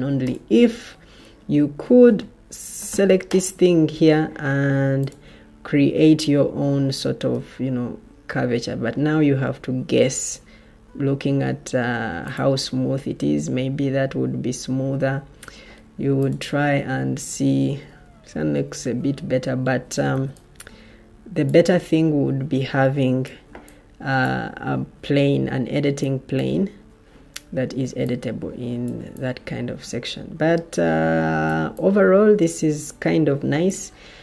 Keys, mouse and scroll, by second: 17.9 Escape, 18.9 Escape, 20.0 o.